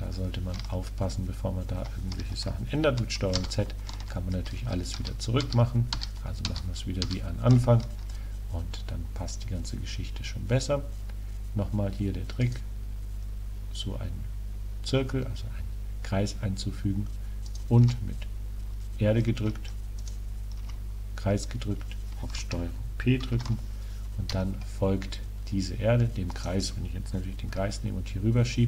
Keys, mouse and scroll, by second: 0.5-2.6 middle drag, 3.5 ctrl+z, 5.0 ctrl+z, 5.5 ctrl+z, 6.0 ctrl+z, 6.5 ctrl+z, 7.1 ctrl+z, 12.5 right click, 17.6 right click, 20.0 right click, 23.4 ctrl+p, 26.4-27.6 right drag, 27.6 g, 28.0 click, 28.2 drag.